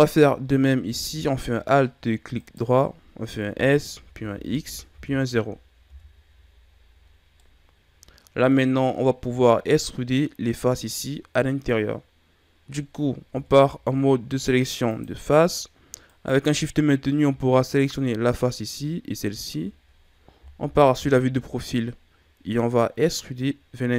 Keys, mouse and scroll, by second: 2.3 alt+right click, 3.5 s, 6.9-7.3 scroll down 1, 7.3-10.3 middle drag, 13.2 ctrl+Tab, 16.0 right click, 19.1 shift+right click, 20.5 KP_3.